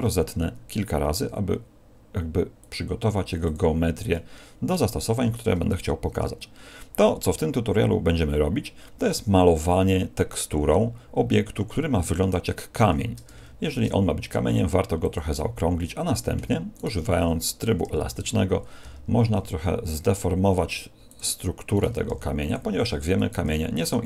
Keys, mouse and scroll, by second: 0.0 middle click, 1.1 w, 13.6 alt+shift+s, 16.7 right click, 18.8 g, 21.1 click, 22.1 g, 23.4 g.